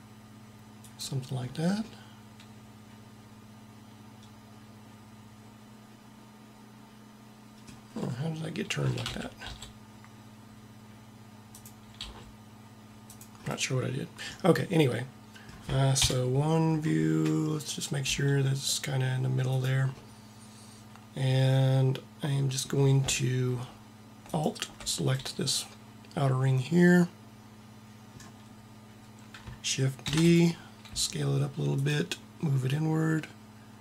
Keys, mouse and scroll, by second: 1.3 middle click, 3.1 middle click, 8.8 a, 9.0 a, 9.3 r, 11.4-13.0 drag, 12.0 r, 16.0 KP_1, 16.8-18.3 middle drag, 18.0 g, 19.9 middle click, 20.1 middle click, 30.1 shift+d, 30.7 s.